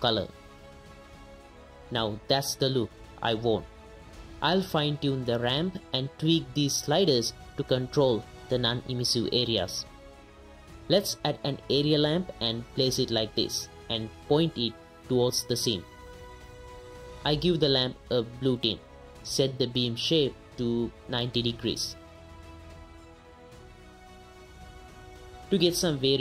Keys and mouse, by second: 0.6 ctrl+shift+click, 1.2 click, 1.6 middle click, 1.9 x, 2.2 middle click, 4.2 click, 4.5 middle click, 4.9 right click, 6.1-6.8 right drag, 7.1 middle click, 7.6 middle click, 7.9 middle click, 8.3 right click, 9.1-10.2 right drag, 10.2 ctrl+s, 10.8 click, 11.2-13.2 typing, 13.6 click, 15.1 drag, 15.1 KP_0, 15.5 click, 15.8 click, 15.8 g, 16.3 g, 16.3 r, 17.2 right click, 20.5 click, 21.0 KP_0, 22.0 click, 23.0 middle click, 23.6 r, 23.7 r, 25.0 click.